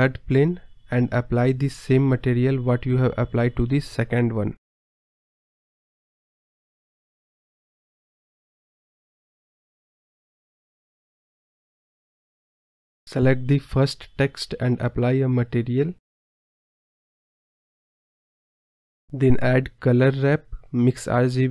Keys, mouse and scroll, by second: 0.9-1.5 drag, 3.4 space, 4.6 click, 4.7 scroll up 4, 8.6-9.8 drag, 10.2 space, 10.6-11.6 drag, 12.1 click, 12.9 scroll down 1, 13.1-14.4 drag, 17.3 scroll down 8, 17.8-19.1 drag, 19.2 scroll up 6, 19.5 scroll down 1, 21.1 shift+a.